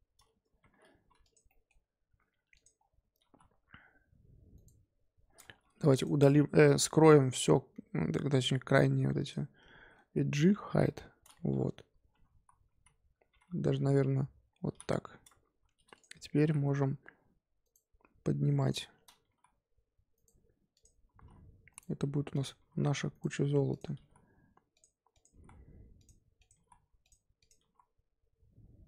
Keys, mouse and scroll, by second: 0.6 1, 1.2 click, 1.4 middle click, 2.1-2.5 scroll up 1, 2.5 click, 2.8 scroll down 3, 3.2 g, 5.5 2, 5.9 alt+click, 6.7-7.3 scroll up 2, 7.3 alt+shift+click, 8.3 alt+shift+click, 9.2 alt+shift+click, 10.8 h, 11.5 1, 12.3 ctrl+z, 12.7 ctrl+z, 13.6 1, 14.7 h, 15.9 click, 16.3 g, 18.6 click, 19.2 g, 20.7 click, 21.1 g, 22.3 click, 22.6 g, 23.7 click, 23.9 g, 25.1 click, 25.3 g, 26.4 click, 26.5 g, 27.4 click, 27.6 g.